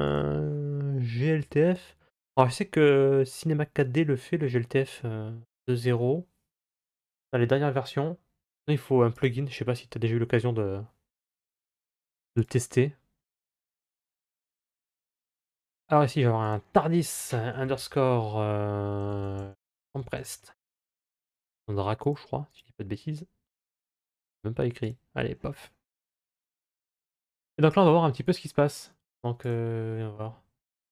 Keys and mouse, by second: 27.1-29.4 drag.